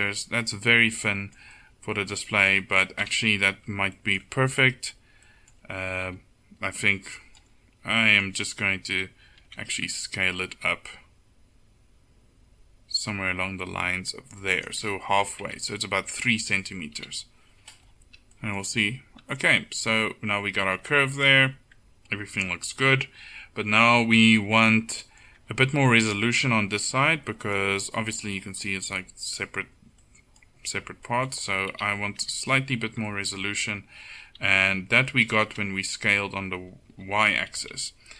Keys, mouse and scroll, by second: 3.1 KP_7, 4.8 Tab, 6.2 KP_1, 9.5 s, 15.5 Tab, 17.1 KP_7, 24.5 Tab, 25.5 Tab, 31.8 KP_7, 32.3 Tab.